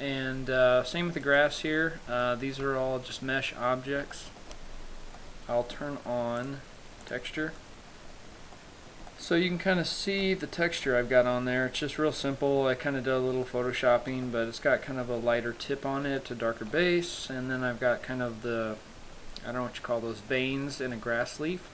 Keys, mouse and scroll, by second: 0.1 middle click, 1.3 scroll down 1, 1.4 right click, 2.0-2.4 scroll down 2, 2.4 middle click, 2.9 Tab, 3.4-4.1 scroll up 3, 4.4 shift+middle click, 4.9-5.4 scroll up 2, 5.4 middle click, 6.8 click, 7.7 click, 7.8 middle click, 8.6 scroll up 4, 8.8 shift+middle click, 9.3 middle click, 10.8 middle click, 11.2-12.0 scroll up 4, 12.0 scroll down 2, 12.2-13.1 scroll down 3, 13.7 middle click, 15.2 shift+middle click, 16.4 shift+middle click, 19.8-20.5 scroll down 1, 20.5-21.2 scroll down 7, 21.2 middle click.